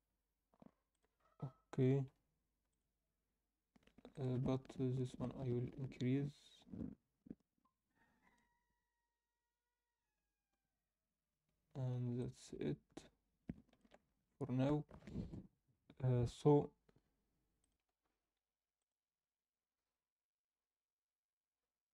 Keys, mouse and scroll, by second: 1.9 click, 1.9 g, 4.1-4.9 drag, 6.8-10.1 drag, 10.1 scroll up 1, 11.9 scroll up 1, 12.1-13.8 ctrl+middle drag.